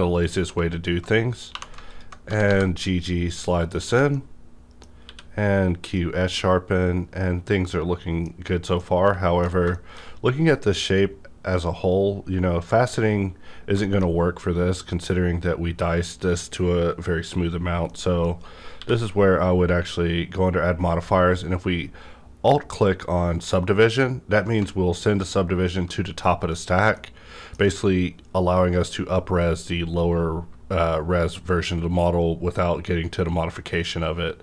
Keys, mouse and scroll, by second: 1.5 2, 1.8 alt+click, 2.2 g, 2.5 g, 3.8 Tab, 4.1-5.8 middle drag, 5.0 q, 5.8 click, 6.4-9.7 middle drag, 8.3-8.8 scroll up 2, 9.5 alt+scroll down 1, 10.1-11.9 scroll up 1, 11.9-12.2 scroll up 1, 13.5 scroll down 1, 13.6 scroll up 1, 13.8 shift+middle click, 14.1 scroll down 2, 17.3 scroll down 1, 17.4 scroll up 1, 17.8-21.0 middle drag, 18.7 q, 24.6 middle click, 24.6 q, 25.2 alt+click, 25.2 q, 26.9-30.2 middle drag.